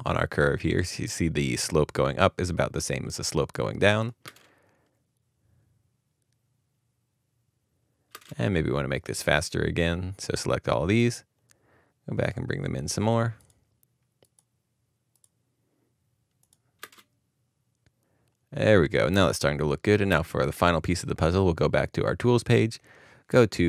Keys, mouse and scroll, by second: 4.2 space, 5.4 space, 8.1 space, 10.4 space, 16.8 space, 20.1 space.